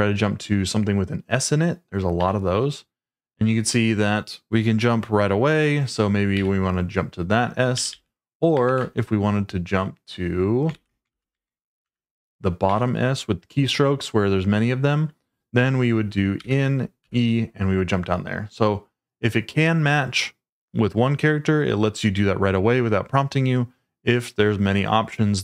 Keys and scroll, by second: 2.1 s, 6.3 d, 7.7-8.7 typing, 10.7-11.4 typing, 11.8 Return, 12.6 s, 16.4 n, 17.0 e.